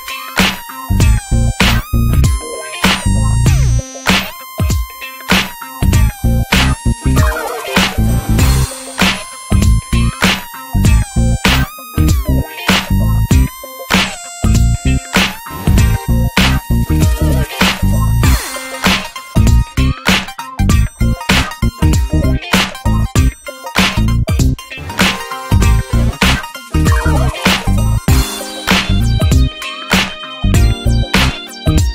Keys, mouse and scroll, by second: 0.6 scroll down 3, 0.8 alt+z, 1.0 Tab, 1.1 click, 1.4 shift+middle click, 1.5 shift+scroll up 1, 1.8 drag, 2.0 click, 2.2-2.6 right drag, 2.6 scroll up 3, 2.8 shift+middle drag, 3.1 Tab, 3.6-4.5 scroll up 3, 3.7 alt+z, 3.8 shift+middle click, 4.5 click, 4.8 click, 5.6 click, 5.9 click, 7.0-8.6 drag, 9.0-10.1 drag, 10.1 alt+z, 10.3 Tab, 10.5 click, 10.7-11.0 scroll down 11, 11.0 shift+middle drag, 11.3 ctrl+s, 11.5 click, 11.8 drag, 11.9 scroll down 3, 12.1 middle click, 12.2-12.6 scroll up 2, 12.3 middle click, 12.6 ctrl+s, 12.8 drag, 13.1 alt+middle click, 13.2 alt+middle click, 13.4 Tab, 13.8 alt+z, 14.0 shift+middle click, 14.1-14.5 scroll up 4, 14.5 shift+middle click, 14.9-16.4 drag, 16.4 alt+z, 16.6 alt+z, 16.7 shift+click, 17.0 alt+z, 17.7 click, 18.7 scroll down 1, 18.9 alt+z, 19.1 Tab, 19.3 scroll down 3, 19.4 shift+middle drag, 19.6 alt+z, 19.7 click, 20.1-20.6 middle drag, 20.6 ctrl+s, 20.7 middle click, 20.8 scroll up 1, 20.9 scroll down 3, 21.1 ctrl+s, 21.4 shift+a, 22.1 scroll down 4, 22.3 s, 23.1-23.4 scroll down 2, 23.1 middle drag, 23.4 ctrl+s, 24.6 Tab, 24.7 scroll up 2, 24.9 middle click, 25.0 ctrl+s, 25.5 2, 25.6-26.7 drag, 27.1 shift+click, 27.4 shift+middle click, 28.0 e, 28.4-28.8 scroll down 2, 28.8 click, 29.8 middle click, 29.9 scroll up 1, 30.1 click, 30.3 ctrl+a, 31.0 Tab, 31.4 Tab, 31.6 click, 31.8 click.